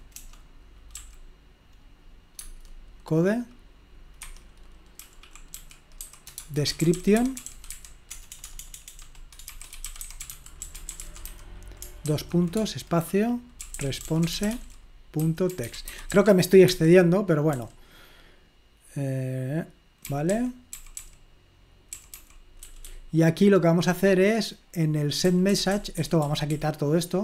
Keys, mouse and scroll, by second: 0.9 s, 2.4 Tab, 4.2 Escape, 5.0 typing, 6.2-17.6 typing, 16.6 Escape, 20.0-20.9 typing, 22.0-24.3 typing, 25.3-27.0 typing.